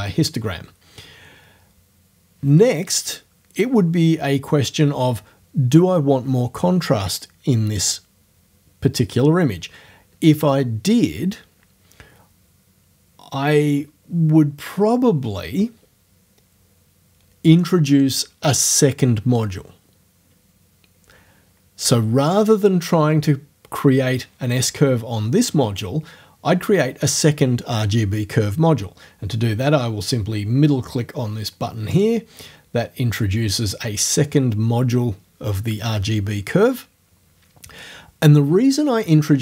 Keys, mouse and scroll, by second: 31.9 middle click, 31.9-32.3 scroll up 1.